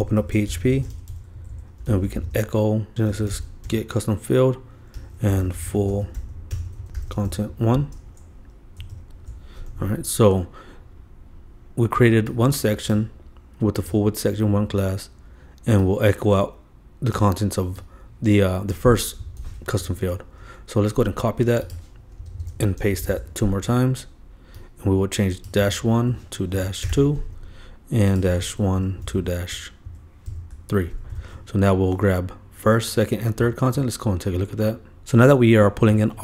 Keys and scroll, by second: 0.0-1.6 typing, 2.9 super+z, 3.2 shift+super+-, 3.3 shift+g, 8.9 alt+super+l, 19.4 super+c, 19.8 super+Right, 22.4 super+Return, 22.5 super+v, 22.8 super+Return, 23.0 super+Return, 23.1 super+v, 26.5 super+Right, 28.7 shift+Left, 29.2 shift+super+d, 29.9 super+Right, 31.1 super+3.